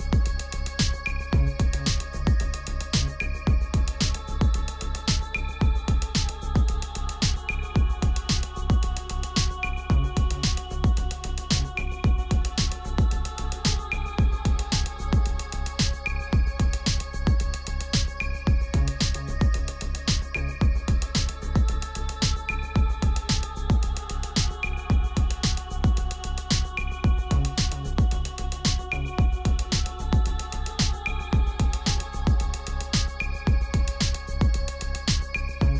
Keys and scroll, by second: 6.5 s, 7.4 u, 9.4-10.9 typing.